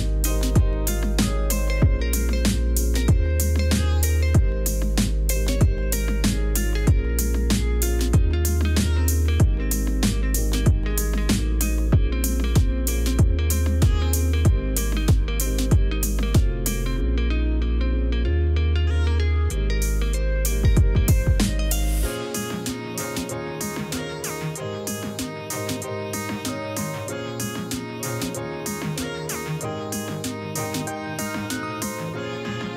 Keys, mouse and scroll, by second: 15.0 Return, 17.8 alt+click, 18.7 b, 19.0 alt+click, 19.7 [, 21.7 ctrl+z, 24.8 ctrl+alt+middle click, 25.0 space, 25.2 click, 25.6 b, 28.1 alt+click, 28.6 [, 30.8 ctrl+0.